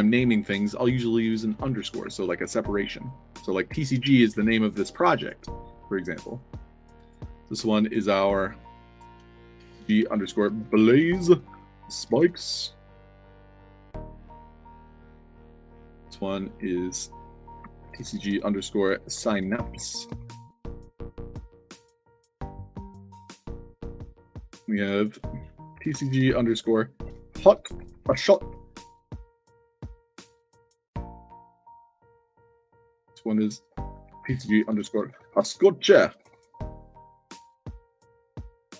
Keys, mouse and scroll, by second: 1.3-2.9 typing, 8.9 click, 9.5-14.3 typing, 13.0 click, 14.1 click, 15.2 click, 15.6 click, 16.3 click, 17.1 click, 17.9-21.8 typing, 21.5 click, 22.7 click, 23.1 click, 24.2 click, 25.0 click, 25.8 shift+c, 27.2 o, 27.8 shift+s, 28.1 o, 29.3-30.8 typing, 32.0 click, 32.7 click, 33.6 click, 34.2-38.7 typing, 37.1 click, 37.7 click.